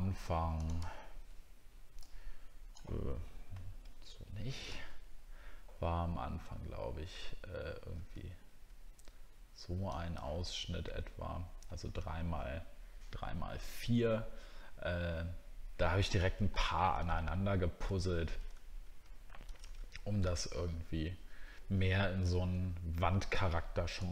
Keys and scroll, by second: 22.2 alt+Tab.